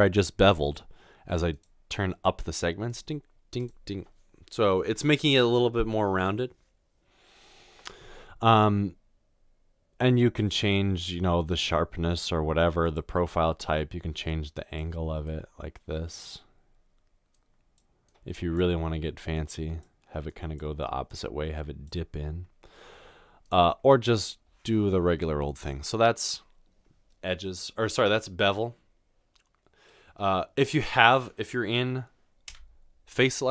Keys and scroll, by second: 32.6 3.